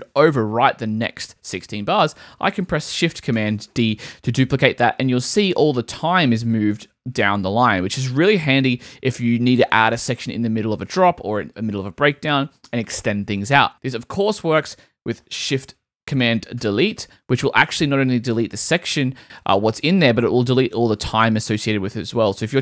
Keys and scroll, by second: 1.9 super+z, 2.7 shift+super+z, 3.3 shift+super+d, 13.7 super+z, 16.6 shift+super+BackSpace.